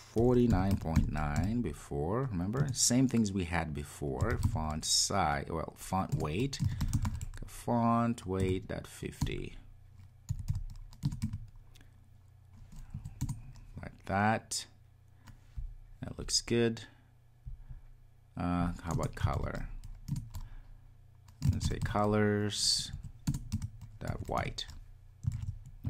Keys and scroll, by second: 6.2 Return, 10.1 Return, 11.1 Return, 20.2 Return, 25.3 super+s.